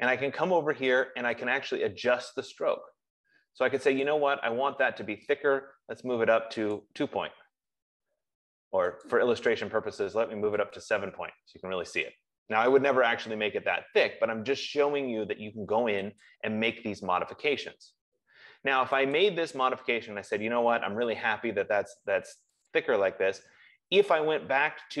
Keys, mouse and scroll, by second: 4.4 click, 7.2 click, 9.7 click, 11.0 click, 16.8 click, 19.6 click, 23.0 click.